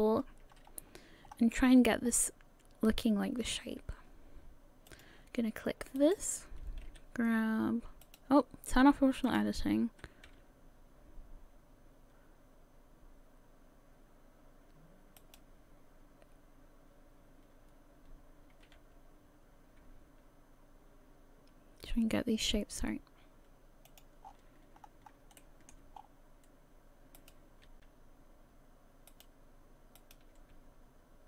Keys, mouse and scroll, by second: 0.5-1.3 scroll up 2, 1.4-2.6 scroll up 4, 4.9 click, 6.0 right click, 6.9 g, 9.3 click, 10.3 g, 18.8 g, 24.3-24.8 scroll down 5, 24.8-25.1 scroll up 2, 25.4 shift+middle click, 25.4 scroll up 1, 26.0 scroll up 1, 27.2 right click, 27.2 scroll up 1, 27.7 g, 30.0 right click, 30.4 g.